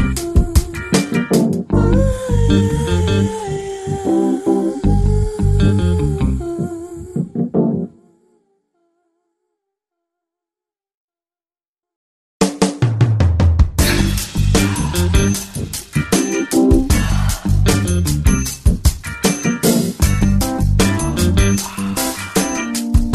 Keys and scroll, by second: 15.1 ctrl+i, 17.1 ], 17.5 ], 20.5 [, 21.2 [.